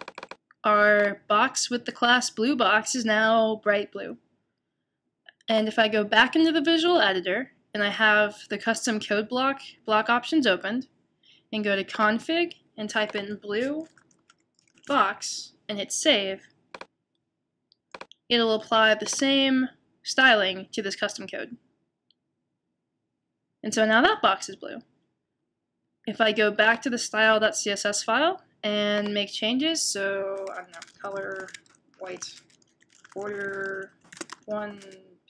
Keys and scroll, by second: 13.6-14.8 typing, 30.7-33.6 typing, 34.8-35.2 typing.